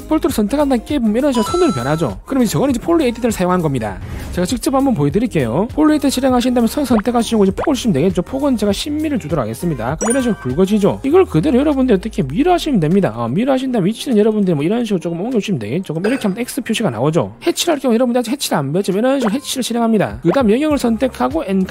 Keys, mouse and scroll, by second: 0.4 click, 7.6 click, 8.6 w, 8.8 right click, 9.1 1, 9.9 right click, 11.0 r, 11.2 right click, 11.4 click, 11.7 click, 12.1 right click, 12.4 click, 13.1 click, 13.4 right click, 14.0 5, 14.2 right click, 14.3 click, 14.5 click, 14.8 right click, 15.1 click, 19.7 right click, 21.2 click.